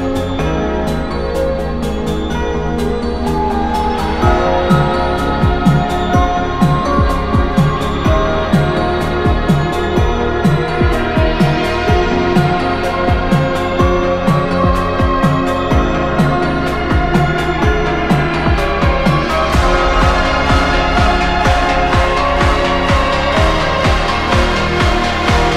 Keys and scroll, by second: 7.0 scroll down 1, 7.0 scroll up 1, 8.0-8.8 scroll down 1, 8.8 ctrl+z, 13.9-14.5 scroll up 2, 14.7 scroll down 1, 14.8-16.2 scroll up 3, 14.9 ctrl+z, 20.6 ctrl+z, 20.8 ctrl+z, 21.0-21.3 scroll down 1, 21.9 scroll up 1, 24.7-25.5 scroll down 1.